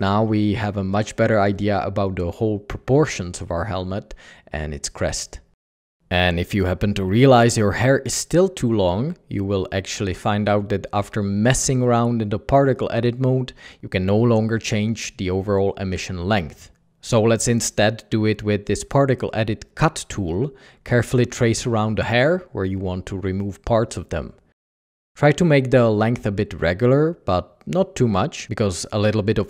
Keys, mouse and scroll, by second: 0.0 Escape, 0.2 Tab, 0.6 alt+a, 16.9 typing, 17.1 ctrl+Tab.